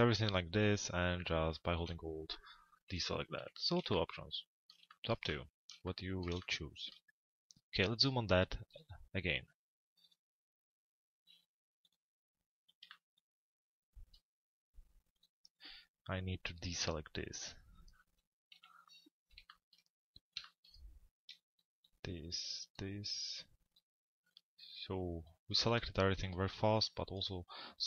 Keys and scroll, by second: 2.4 p, 3.4 z, 17.7 l, 18.5 z.